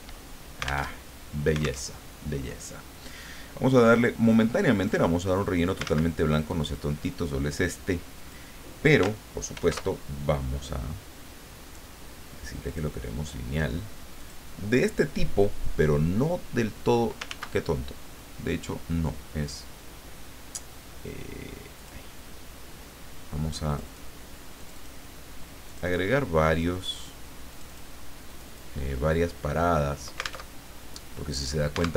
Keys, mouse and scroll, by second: 0.9 alt+Tab, 1.8 alt+Tab, 4.7 click, 5.8 ctrl+z, 6.3 ctrl+click, 8.1 click, 9.5 ctrl+shift+f, 12.6 click, 14.1 click, 21.7 click, 23.7 click, 24.6 click, 25.7 click, 26.6 click, 27.5 click, 28.3 click, 30.5 alt+Tab.